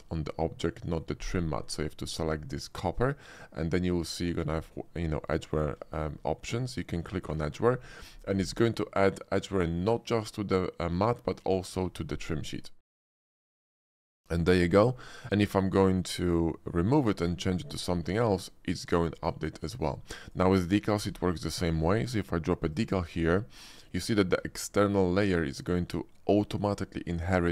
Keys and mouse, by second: 2.5 click, 5.3 shift+middle click, 5.9 shift+middle click, 13.3 shift+middle drag, 13.7 middle click, 14.3 shift+middle drag, 15.0 middle click, 15.7 shift+middle click, 19.4 middle drag, 19.8 shift+click, 20.4 click, 20.7 shift+click, 21.1 d, 24.2 shift+click.